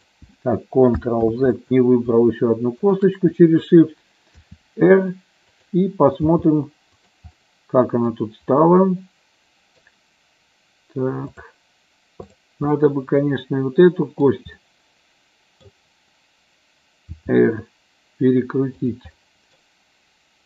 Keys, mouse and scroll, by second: 0.1 click, 1.4 ctrl+z, 2.9 shift+click, 4.6 r, 6.3 g, 7.1 click, 7.6 middle click, 9.0 middle click, 11.4 click, 12.9-14.3 middle drag, 14.7-15.9 middle drag, 17.4 r, 19.0 click, 19.4 middle click.